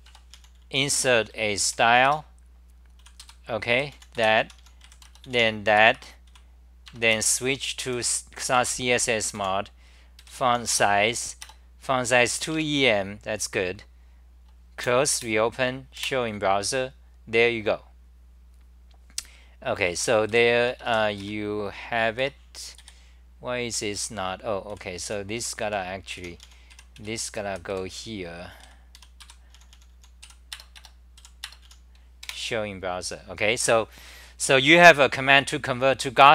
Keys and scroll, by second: 0.1 Tab, 2.1 Return, 2.8-4.8 typing, 5.8 Return, 6.3 c, 7.9 F10, 8.6 Home, 9.4 u, 12.5 Home, 14.8 super+w, 15.2 shift+super+t, 16.0 super+r, 19.9 c, 20.3 g, 21.2 Right, 22.2 Return, 23.3 3, 24.6-31.2 typing, 30.8 Delete, 31.7 Delete, 32.3 super+r.